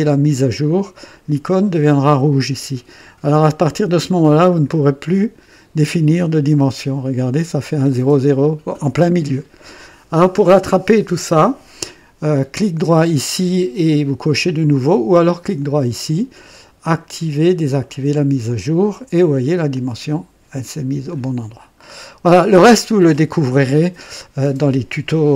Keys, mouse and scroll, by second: 0.1 click, 4.4 click, 6.7 click, 15.5 right click, 17.7 click, 19.6-21.2 drag, 21.7-22.2 scroll down 1.